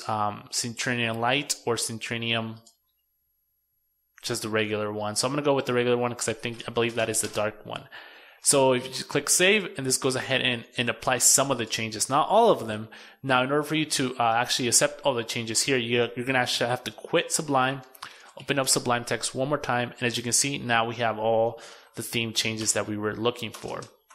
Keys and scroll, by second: 7.6 super+s, 11.4 super+w, 16.0 super+q, 20.6 super+n, 23.0 super+w.